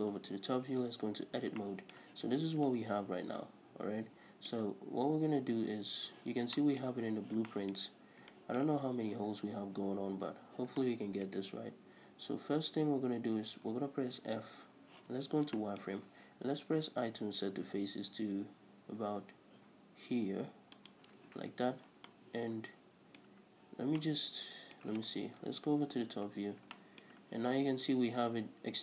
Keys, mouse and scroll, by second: 0.1 KP_7, 0.6 Tab, 1.0 scroll up 2, 1.2 a, 2.4 scroll down 2, 5.5-6.4 scroll up 1, 7.8 scroll up 1, 10.4 scroll down 1, 14.0 f, 14.9 z, 20.9 shift+click, 21.6 z, 21.8 scroll down 2, 22.0-28.8 middle drag, 25.4 KP_7, 26.3-26.7 scroll up 2.